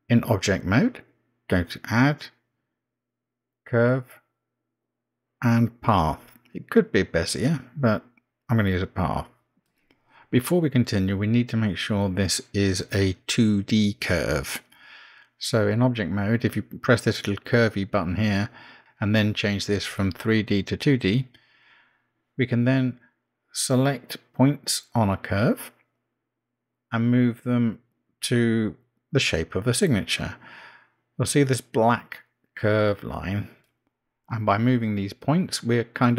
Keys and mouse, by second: 1.8-6.3 drag, 10.3 Tab, 11.6 click, 12.7 Tab, 17.6 click, 20.5 click, 24.6 Tab, 26.5 click, 27.9 g, 33.5 click, 34.5 g.